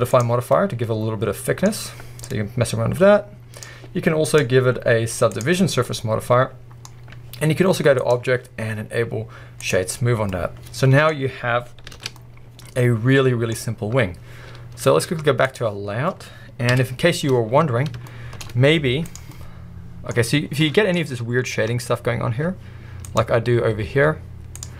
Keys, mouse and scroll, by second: 0.2 click, 0.6-2.3 middle drag, 1.7-2.3 scroll up 1, 2.3-5.8 drag, 5.7 scroll down 1, 5.8-6.9 middle drag, 6.9-8.0 scroll up 1, 8.0-9.7 scroll up 1, 9.7-10.2 drag, 10.1 scroll down 1, 10.3-11.1 middle drag, 12.0 alt+a, 12.1-15.5 middle drag, 13.7-15.5 scroll up 1, 15.5 click, 15.6-17.6 middle drag, 15.8-16.7 scroll up 1, 16.7 KP_1, 17.4 scroll up 2, 18.1-18.4 shift+middle drag, 19.2 drag, 19.3-21.7 middle drag, 20.3 scroll up 1, 21.7 Tab, 23.1 click, 24.7 z.